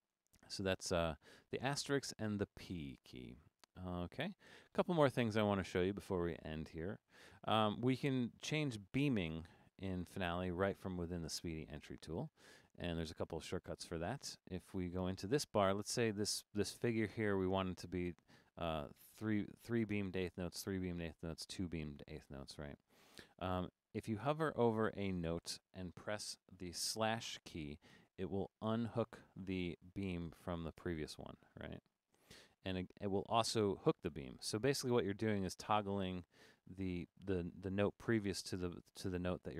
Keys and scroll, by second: 24.0 Right, 24.5 Right, 25.4 Right, 31.2 /, 32.7 Right, 34.1 /, 35.3 Right, 35.7 Right, 36.3 /, 39.2 Down, 39.3 Down.